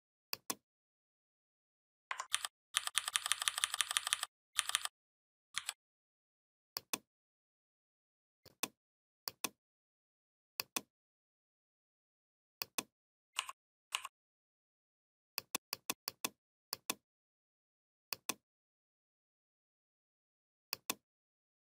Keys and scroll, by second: 2.2 ctrl+[, 5.0 ctrl+[, 5.4 ctrl+].